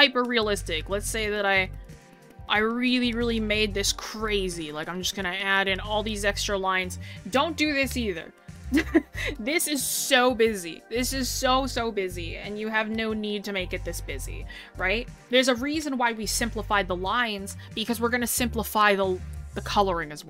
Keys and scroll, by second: 6.4 scroll down 1, 7.0 scroll up 1, 14.7 scroll, 17.4 scroll.